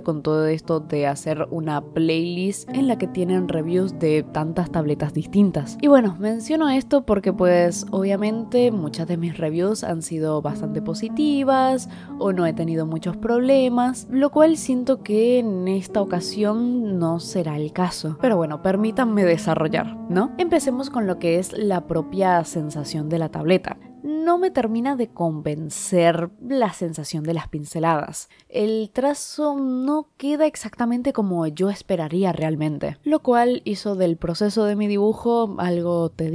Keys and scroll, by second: 0.9-3.1 typing, 6.5-9.8 typing, 11.7 i, 11.9 ctrl+z, 12.1 i, 12.4 ctrl+z, 12.8 ctrl+z, 13.0 ctrl+z, 13.2 ctrl+z, 13.4-14.3 typing, 15.5 ctrl+z, 15.7 ctrl+z, 16.3-25.1 typing, 20.0 ctrl+z, 26.9 i, 27.1 i, 27.3 ctrl+z, 27.8 i, 28.3 space, 28.6 ctrl+z, 28.8 ctrl+z, 31.5-33.1 typing, 33.8 ctrl+z, 33.9 ctrl+z, 34.2 ctrl+z, 34.3 ctrl+z, 36.2 i.